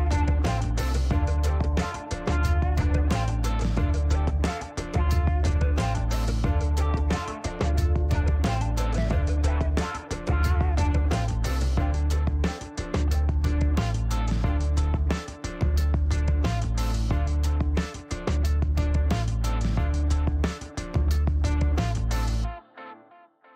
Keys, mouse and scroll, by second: 0.6-1.1 middle drag, 1.2 scroll down 2, 1.8 middle click, 4.2 click, 4.9-5.3 middle drag, 5.5 shift+right click, 7.8 space, 8.0 click, 8.2 space, 8.4 shift+right click, 8.7 shift+middle click, 8.9 scroll down 2, 9.0 shift+right click, 9.4 shift+middle click, 9.9 click, 11.6 click, 11.7 space, 12.0 middle click, 12.2 shift+right click, 12.7 shift+scroll up 1, 12.9 middle click, 13.0 shift+right click, 13.4 shift+right click, 13.9 click, 14.0 space, 14.9 click, 17.4 click, 21.6 click.